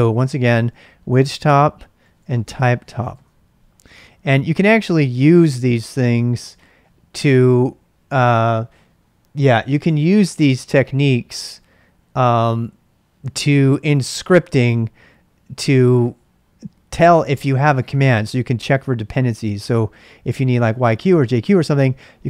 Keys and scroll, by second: 0.0-0.8 typing, 1.9-3.6 typing, 5.0-5.8 typing.